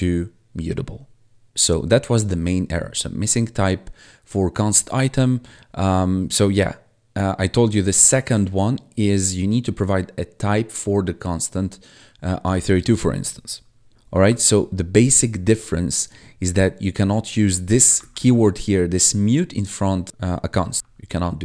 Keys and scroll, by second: 14.2 ctrl+`, 18.0 1, 20.8 1.